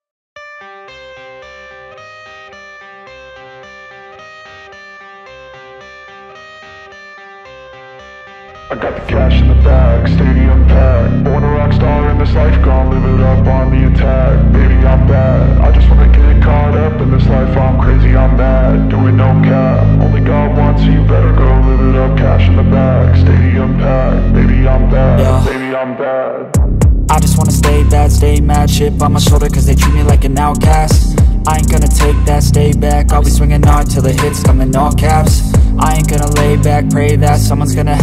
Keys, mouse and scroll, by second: 0.4 alt+click, 0.9 scroll up 2, 1.2 alt+middle click, 1.7-2.5 scroll up 1, 3.0 scroll down 1, 4.2 alt+middle click, 4.7-5.9 scroll up 1, 9.5-10.5 scroll down 1, 10.5-11.4 scroll up 1, 11.4-12.7 scroll down 1, 13.0 ctrl+v, 16.1-16.7 scroll up 1, 16.7-17.4 scroll down 1, 17.4-17.8 scroll up 1, 17.9 alt+middle click, 18.1 alt+scroll up 1, 18.3 alt+middle click, 18.6 m, 22.2 shift+click, 22.9 shift+click, 23.3 shift+click, 24.1 shift+click, 24.9-25.3 scroll down 1, 25.3 alt+middle click, 25.6-26.9 scroll up 1, 27.1 scroll down 1, 27.6 shift+click, 28.2 shift+click, 28.6 shift+click, 29.2 shift+click, 29.5-29.8 scroll down 1, 30.7-31.1 scroll down 2, 30.8 alt+middle click, 32.1 shift+click, 32.2-32.7 scroll up 1, 32.7 right click, 34.2 alt+click, 35.4 scroll up 1, 35.9 alt+middle click, 36.0-36.7 scroll up 4.